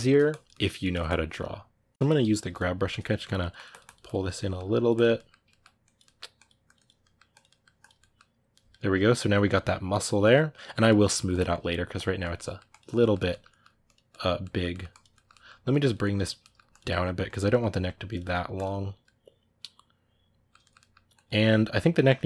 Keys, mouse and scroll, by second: 0.0 click, 0.3 ctrl+middle click, 0.8-2.0 drag, 2.0 g, 2.2 f, 2.7 click, 2.9 ctrl+middle click, 3.2 click, 4.0 ctrl+middle click, 4.5 click, 4.9 middle click, 5.6 click, 5.8 middle click, 6.2 click, 6.8 middle click, 7.2 click, 7.2 middle click, 7.6 click, 7.8-10.6 middle drag, 10.6 click, 10.8 middle click, 11.1 click, 11.3 middle click, 11.7 click, 12.0 ctrl+middle click, 12.5 click, 12.8 ctrl+middle click, 13.6 click, 13.9 middle click, 14.7 click, 14.9 ctrl+middle click, 15.5 click, 16.2 ctrl+middle click, 16.5 click, 16.7 middle click, 17.1 click, 17.3 middle click, 18.0 click, 18.8-21.0 middle drag, 21.0 click, 21.6-22.2 middle drag.